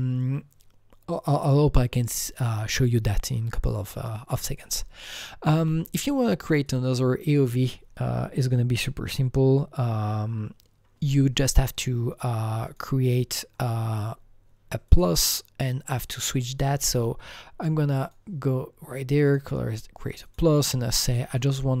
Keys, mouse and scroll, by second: 5.9 click, 6.6 click, 12.6 click, 12.7 click, 14.9 click, 17.6 Delete, 17.6 click, 18.0 click, 19.3 click, 20.2 click, 21.0 click.